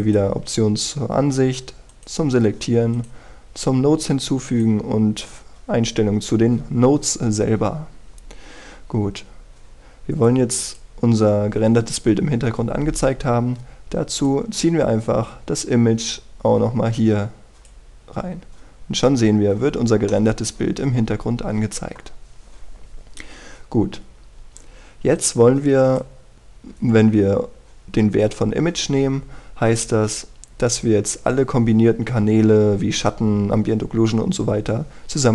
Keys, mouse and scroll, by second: 1.0-19.0 drag, 19.5-19.9 scroll down 1, 19.9-21.1 scroll up 1, 21.1-23.0 middle drag, 26.1 click, 26.3-30.1 scroll up 1.